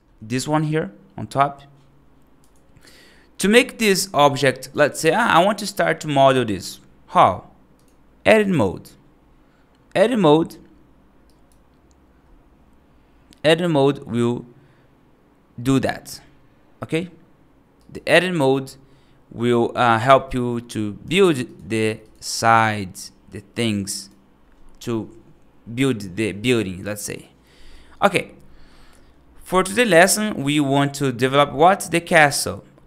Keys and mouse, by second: 0.0-4.4 drag, 4.6 Escape, 5.0 right click, 5.6 right click, 5.8 middle drag, 6.2 right drag, 7.7-8.5 drag, 11.1 right click, 17.6 right click, 21.9 click, 21.9 3, 23.8 right click, 27.6 right click, 29.8 right click.